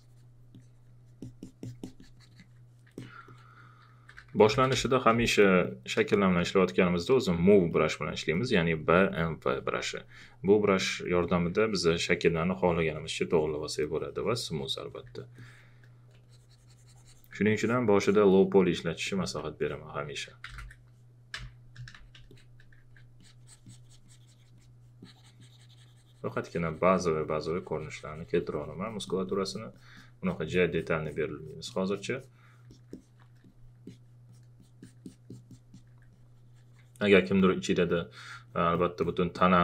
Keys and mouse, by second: 0.5 alt+click, 3.0 alt+click, 3.6-5.0 typing, 4.8 click, 5.4 alt+click, 6.1 space, 6.5 click, 6.7 alt+click, 19.0 alt+click, 20.0-21.9 typing, 21.4 click, 22.4 click, 22.9 alt+click, 28.9 click, 30.2 alt+click, 33.4 alt+click.